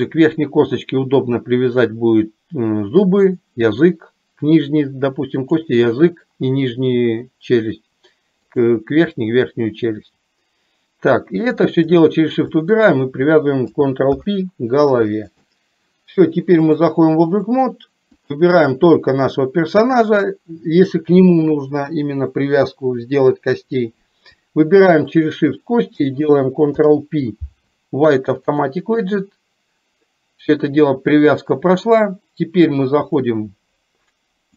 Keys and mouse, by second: 5.5 click, 8.6 click, 11.6 shift+click, 12.8 shift+click, 16.7-17.7 drag, 25.1 shift+click, 33.2-34.5 drag.